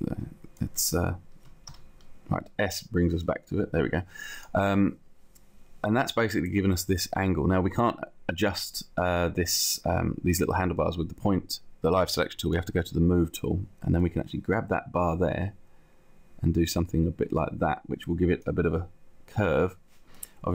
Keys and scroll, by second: 0.0 1, 1.8 s.